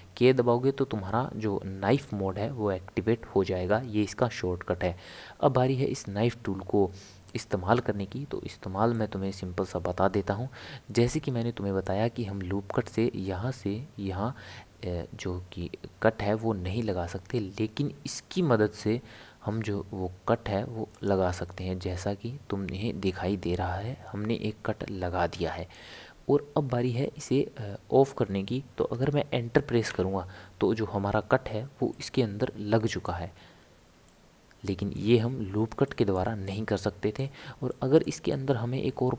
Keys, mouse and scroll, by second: 2.0 k, 8.9-12.1 middle drag, 31.9-33.3 middle drag, 33.3 scroll up 1, 33.6-34.0 scroll down 1, 34.0-39.1 middle drag.